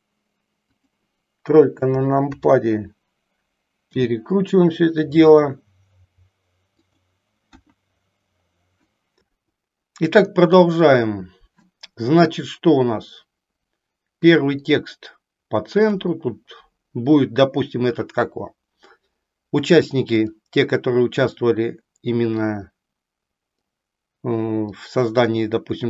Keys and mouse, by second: 0.9 KP_3, 2.2 KP_3, 3.9 r, 6.9 click, 7.6 KP_1.